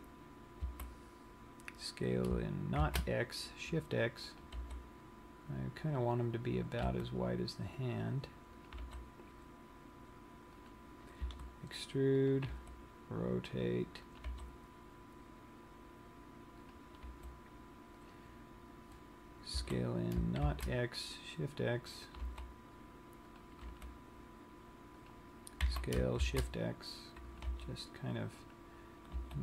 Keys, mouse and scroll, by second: 0.7 click, 1.1 s, 4.7 click, 5.0 g, 6.5 click, 7.6 r, 9.2 click, 9.3 g, 11.3 click, 11.7 e, 12.9 click, 12.9 r, 14.6 click, 14.6 g, 17.4 click, 17.6 r, 18.7 click, 20.2 s, 22.7 click, 23.0 g, 24.1 click, 24.4 r, 25.6 click, 26.2 s, 28.1 click, 28.1 g, 29.0 click.